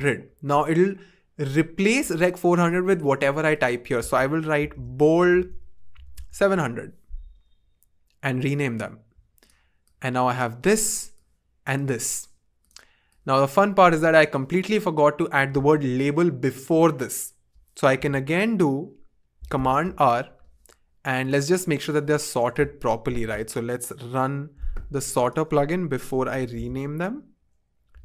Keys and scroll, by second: 0.0-0.2 typing, 4.5-6.8 typing, 19.5 super+r, 23.1 super+r, 26.3 super+/, 26.5-28.0 typing.